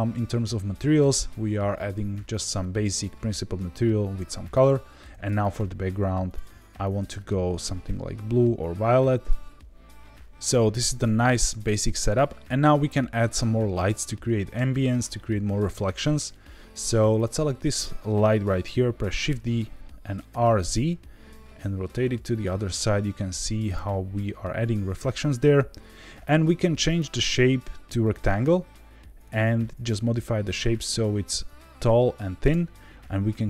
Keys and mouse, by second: 4.4 click, 5.5 click, 6.3 click, 17.1 click, 19.2 shift+d, 20.3 r, 20.5 z, 23.6 click, 26.9-28.1 drag, 29.2-32.4 drag.